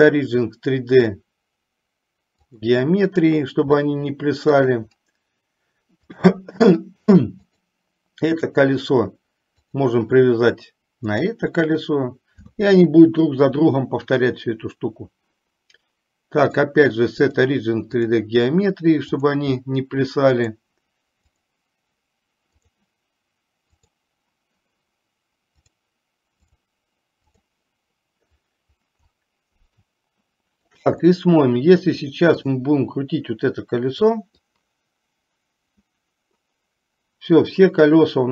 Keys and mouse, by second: 4.1-5.0 shift+middle drag, 7.6-9.0 drag, 9.7 click, 16.6-18.5 drag, 19.3 click, 20.5-21.7 drag, 22.7 click, 25.7-27.7 drag, 30.0-31.0 shift+middle drag, 32.7 drag, 34.5-38.3 drag.